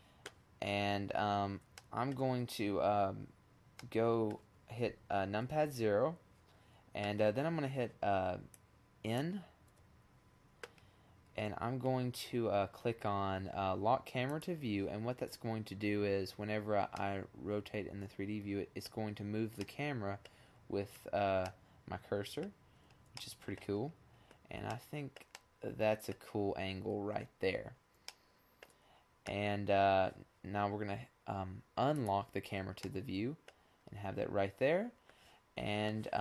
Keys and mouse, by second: 1.2-2.2 middle drag, 2.5 KP_0, 5.6 click, 6.2 click, 7.0 n, 13.2-13.8 middle drag, 16.7-20.4 middle drag, 24.2-25.8 middle drag, 28.5 middle click, 29.5-30.3 drag, 30.3 middle click, 30.7 middle click, 31.0-33.3 middle drag, 35.2 n.